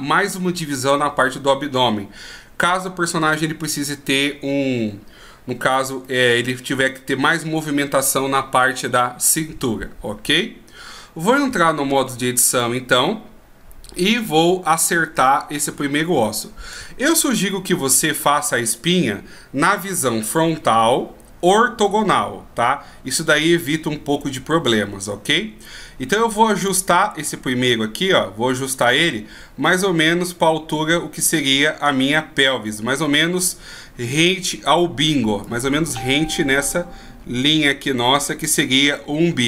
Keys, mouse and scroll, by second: 6.2 middle click, 9.7 scroll up 2, 11.5 Tab, 12.2-12.8 scroll up 1, 12.8 middle click, 12.8 scroll up 1, 15.6 shift+scroll up 1, 16.8-20.0 shift+scroll down 1, 20.7 KP_1, 26.8 right click, 29.0 right click, 29.9 click, 34.7-35.6 d, 35.6 click, 38.6 d, 38.7 d.